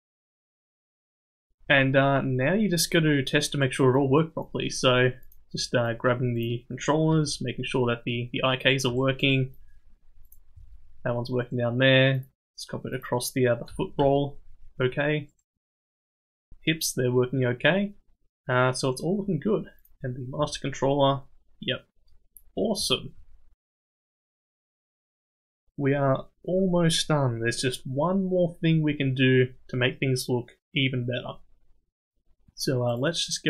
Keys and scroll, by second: 7.1 g, 10.5 g, 13.7 r, 16.1 g, 20.4 g.